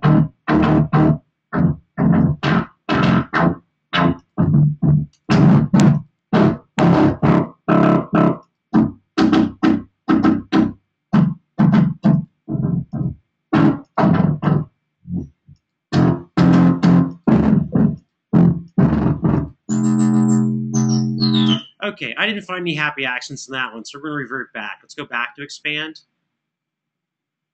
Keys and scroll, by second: 21.3 space.